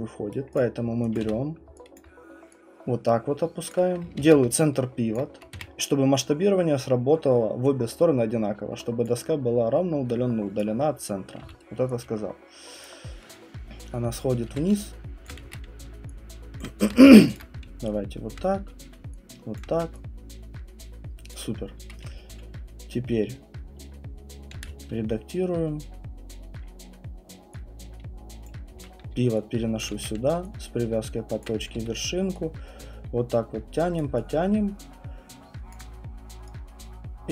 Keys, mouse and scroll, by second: 0.3 right click, 0.5 click, 1.1 click, 1.2 w, 1.9 alt+click, 3.7 click, 4.2 ctrl+c, 5.1 alt+click, 5.5 r, 7.6 click, 9.0 alt+click, 10.1 alt+right click, 10.7 alt+click, 11.4 w, 12.8 click, 13.3 alt+right click, 13.3-14.1 scroll, 14.5-19.6 typing, 14.5 middle click, 15.3 click, 16.6 click, 17.2 ctrl+alt+z, 17.4 alt+click, 18.3 click, 19.6 click, 21.3 alt+click, 24.5 ctrl+d, 28.5 click, 28.7-31.7 typing, 29.8 click, 31.4 click, 34.0 click, 35.7 alt+click.